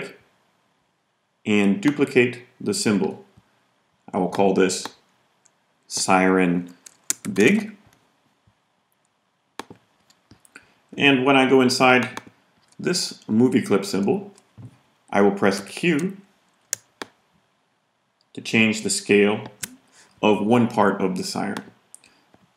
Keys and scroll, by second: 6.9-7.9 typing, 15.5 q.